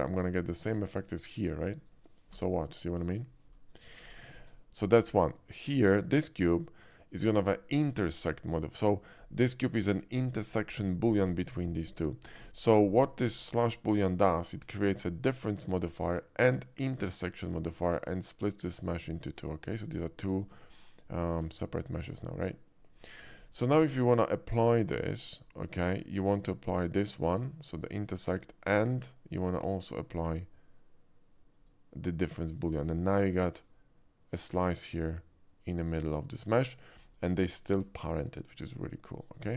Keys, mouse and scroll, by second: 0.0 click, 0.4-0.9 middle drag, 0.9 click, 1.8 click, 2.5 g, 4.0 middle click, 4.4 ctrl+z, 5.7 click, 12.9-13.6 middle drag, 15.3 shift+click, 17.7 shift+middle click, 18.6 click, 19.1 shift+middle drag, 19.8 shift+click, 20.4 shift+click, 20.9 shift+click, 21.5 shift+click, 23.3 middle click, 27.2 click, 27.6 click, 28.3 click, 30.2 click, 31.5 click, 32.5 click, 33.5 g, 36.5 right click, 36.9 click, 37.7 g.